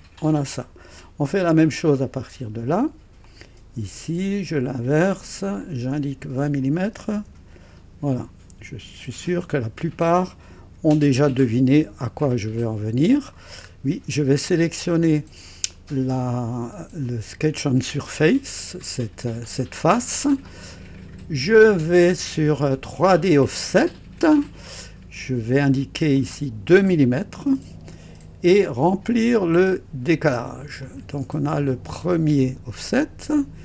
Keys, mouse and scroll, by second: 0.5 &, 1.7 click, 3.2 click, 3.4 typing, 4.5 click, 5.6 click, 6.8 KP_2, 7.0 KP_0, 7.3 Return, 8.1-8.9 typing, 10.6 typing, 11.4-13.5 drag, 13.6 scroll up 1, 15.0 click, 16.2-17.9 drag, 18.2-20.6 drag, 21.6 click, 23.7 click, 26.1 click, 27.5 KP_2, 29.1 click, 30.8 click, 31.6-33.6 drag.